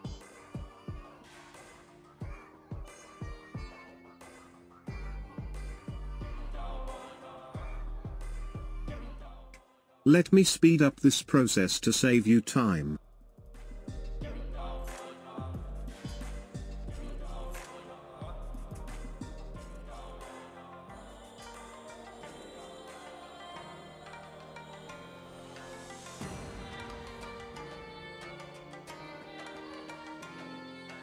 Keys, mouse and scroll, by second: 2.9-6.0 drag, 8.3-11.4 drag, 11.5-13.4 drag, 14.1-15.5 drag, 16.5-16.9 scroll up 12, 16.9-17.3 scroll down 13, 18.1 click, 19.7-21.3 drag, 21.5-23.0 drag, 23.5-24.9 drag, 25.3-27.4 drag, 27.5 click, 29.0-31.0 drag.